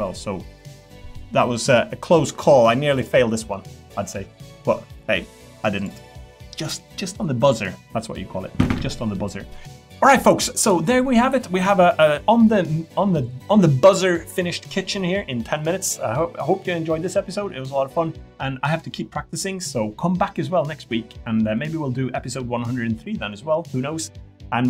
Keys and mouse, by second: 5.8 click.